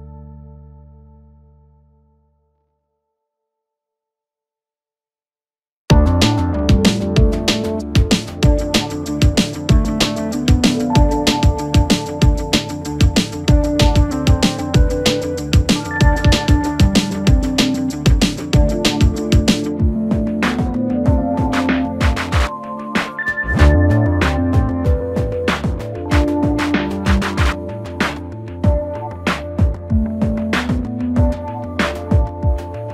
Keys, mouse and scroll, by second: 0.2 middle click, 1.1 click, 1.8 shift+click, 2.1-2.7 scroll up 1, 2.7 f, 3.2 click, 3.5 f, 3.8 scroll down 1, 4.4 KP_3, 5.2 Tab, 6.5 click, 7.2-8.0 shift+middle drag, 8.0-8.5 scroll up 1, 8.5 Tab, 10.0 1, 12.3 click, 13.7 click, 14.5 g, 22.4 click, 23.2 g, 27.2 click, 28.2 g, 31.1 click, 31.6 g.